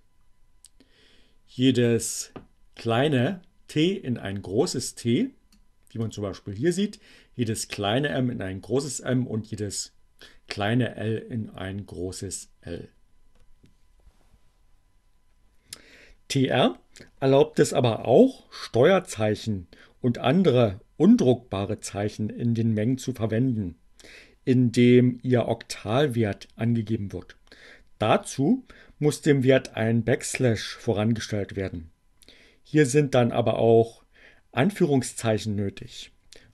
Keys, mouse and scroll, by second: 4.5-6.3 drag, 11.6 click.